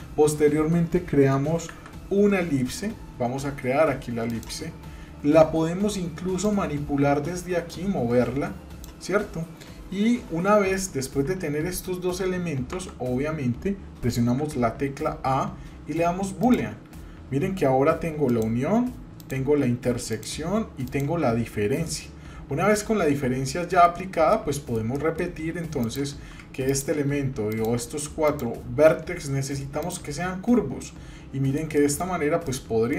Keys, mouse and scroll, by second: 1.7 shift+a, 6.4-8.9 drag, 11.2 Tab, 12.7 Tab, 14.2 a, 16.4 click, 18.3-19.3 drag, 20.1 click, 21.9-23.9 middle drag, 24.3 middle click, 25.0 shift+middle click, 25.8 click, 26.7-27.7 shift+drag, 29.8 click, 30.8 middle click, 31.8 shift+middle click, 32.2 scroll up 1, 32.5 middle click.